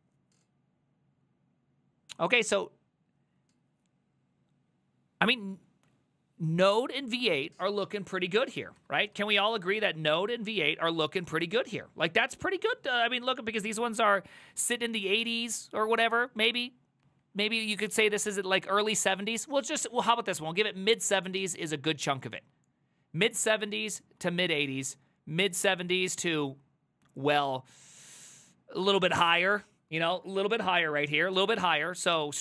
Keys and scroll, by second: 8.5 ctrl+a, 8.6 [, 8.8 ctrl+u, 9.2 ctrl+u, 10.2 ctrl+d, 10.5 ctrl+d, 10.6 ctrl+d, 11.5 ctrl+u, 11.7 ctrl+u, 12.4 ctrl+d, 12.5 ctrl+d, 12.7 ctrl+d, 13.0 ctrl+u, 13.5 ctrl+u, 14.0 ctrl+d, 14.2 ctrl+d, 14.3 ctrl+d, 14.9 ctrl+u, 15.1 ctrl+u, 17.1 ctrl+d, 17.3 ctrl+d, 17.7 ctrl+d, 24.3 ctrl+u, 24.5 ctrl+u.